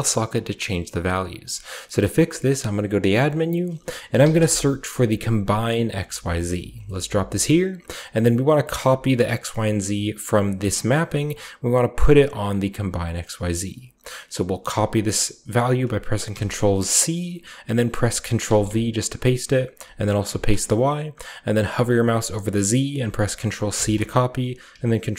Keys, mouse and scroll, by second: 1.6 scroll down 1, 2.2 typing, 4.0 typing, 5.3 click, 6.4 click, 12.4 click, 16.2 ctrl+c, 18.4 ctrl+v, 20.2 ctrl+v, 23.6 ctrl+c.